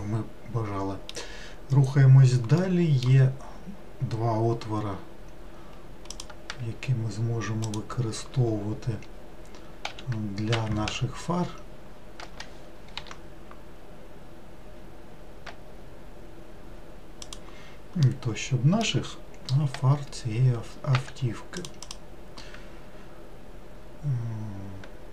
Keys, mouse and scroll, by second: 6.2 click, 7.7 shift+click, 10.0 q, 10.9 w, 11.4-13.1 scroll up 2, 13.1 i, 18.1-19.7 middle drag, 19.7 scroll up 1, 21.1 1, 21.7 click, 21.9 click.